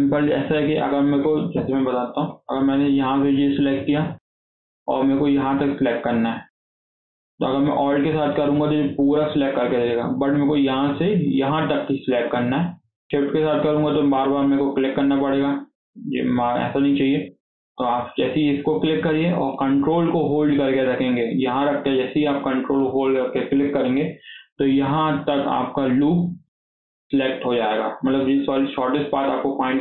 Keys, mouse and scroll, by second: 1.4 KP_7, 2.1-3.3 shift+middle drag, 3.3 click, 8.0 alt+click, 10.4 click, 13.6 shift+click, 14.0 shift+click, 14.3 shift+click, 14.5 shift+click, 14.8 shift+click, 17.6 click, 23.4 ctrl+click.